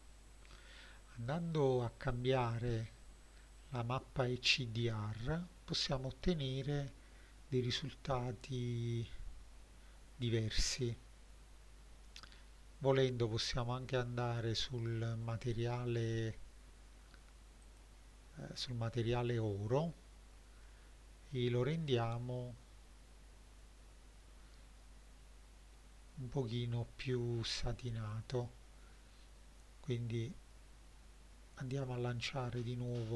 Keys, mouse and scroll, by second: 1.4 middle click, 5.3 middle click, 13.5 click, 17.7 click, 19.5-20.8 scroll down 2, 21.8-26.1 drag, 28.1 click.